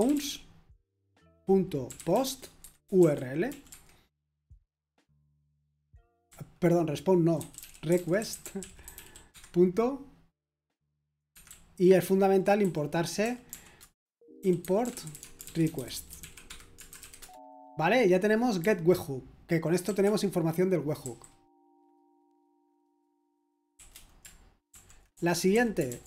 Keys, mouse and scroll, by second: 0.0-4.0 typing, 6.0-9.8 typing, 11.3-21.0 typing, 13.8 Return, 23.5-26.0 typing.